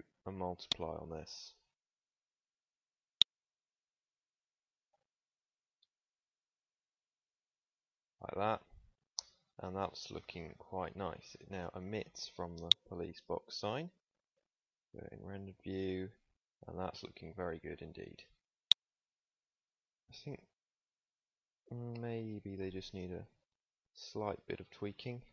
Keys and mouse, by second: 9.6 middle click, 10.4 ctrl+s, 11.7 Tab, 12.4 Tab, 13.1 click, 19.1 click, 19.5 Tab, 22.8 z, 24.1 z, 24.8 click.